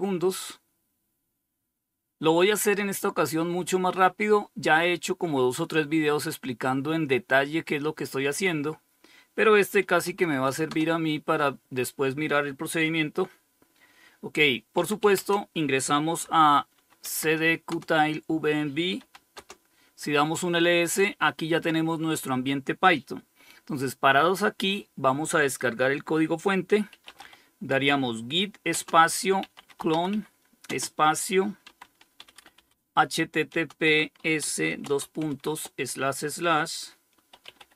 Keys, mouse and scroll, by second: 9.1-9.9 typing, 14.0-15.9 typing, 16.2 Tab, 16.9 Return, 18.0-18.8 typing, 25.9-34.6 typing, 36.3-37.7 typing.